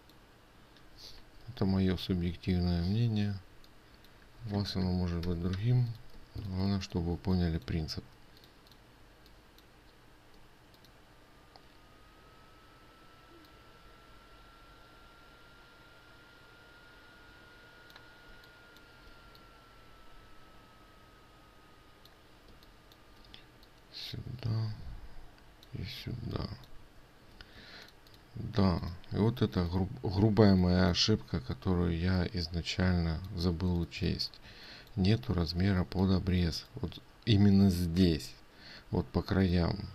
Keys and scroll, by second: 5.8 ctrl+7, 6.7 ctrl+space, 7.0 ctrl+space, 7.0 ctrl+7, 28.1 ctrl+space, 34.0 ctrl+space.